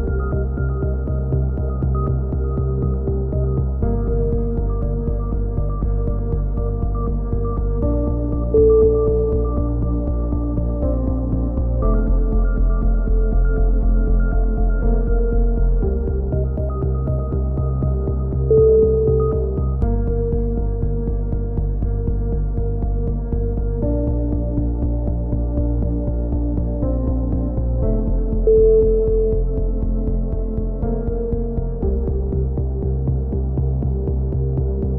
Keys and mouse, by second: 0.2 f, 0.3 a, 0.4 click, 2.8 click, 4.2-10.8 drag, 10.5 right click, 10.8 KP_1, 10.9 z, 11.4 e, 11.8 click, 14.0 click, 14.7 e, 15.0 click, 15.7 click, 16.4 z, 16.8 click, 16.8 right click, 17.5 KP_1, 17.7 z, 18.0 a, 18.4 z, 18.8 click, 20.1 click, 20.3 right click, 20.5-23.1 typing, 20.9 right click, 22.0 right click, 22.3 click, 23.8-25.1 drag, 25.1-26.4 typing, 25.7 click, 26.4 click, 29.3-31.4 right drag, 30.1 f, 31.0 f, 31.2 s, 31.5 ctrl+z, 31.6 a, 31.8 middle click.